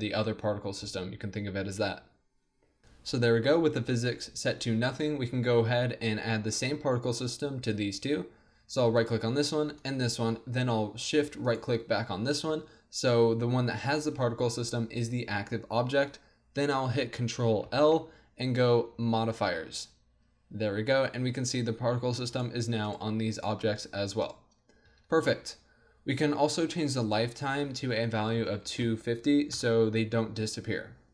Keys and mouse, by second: 9.0-17.6 drag, 17.6 ctrl+l, 21.2 a, 22.3-26.2 drag, 24.9 a, 26.2 middle click, 27.1-29.1 drag.